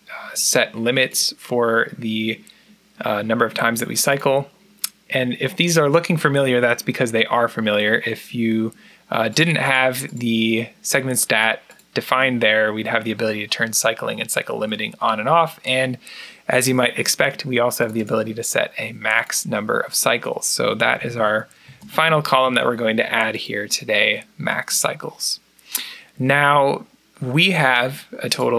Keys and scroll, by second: 20.5-22.8 typing, 28.4 typing.